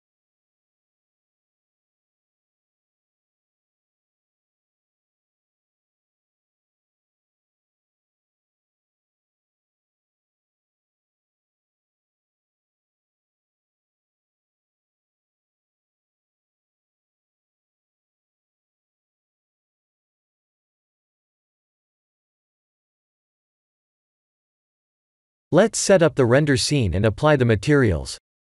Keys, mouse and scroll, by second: 1.2 middle click, 1.9 shift+a, 3.3 shift+z, 3.9 shift+z, 4.3 click, 4.7 middle click, 6.5 middle click, 6.5-6.8 middle click, 6.6 middle click, 6.7 middle click, 6.9 middle click, 7.0 middle click, 7.9 middle click, 8.8-10.1 scroll down 6, 10.7 click, 10.7 scroll down 2, 14.0-15.4 scroll down 14, 15.7-17.5 scroll down 3, 17.5 click, 17.5-18.7 scroll down 2, 19.0 click, 19.3 middle click, 22.8 click, 25.4-27.2 scroll up 13, 27.2 click, 27.2-28.3 scroll up 1, 28.3 click.